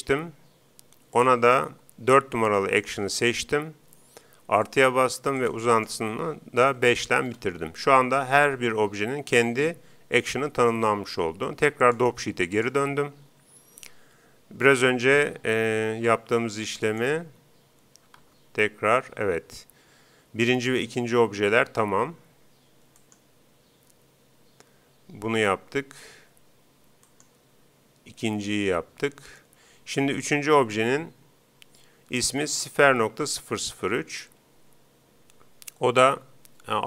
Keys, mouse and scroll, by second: 1.1-2.9 drag, 4.7-7.4 drag, 11.9-13.6 drag, 16.9-18.6 right drag, 18.3 alt+a, 20.0 Escape, 23.0-24.7 right drag, 27.0-28.7 right drag, 30.1-31.8 right drag.